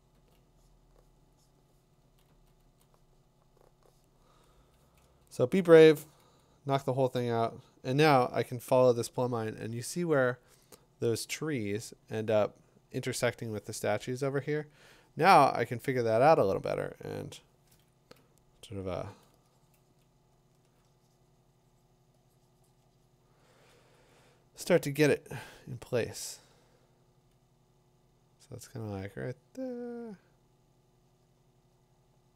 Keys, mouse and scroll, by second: 0.1 [, 2.0 [, 2.3 [, 2.6 [, 4.6-6.0 typing, 14.6 click, 15.7 click, 19.1 click, 20.5 click, 24.7 click.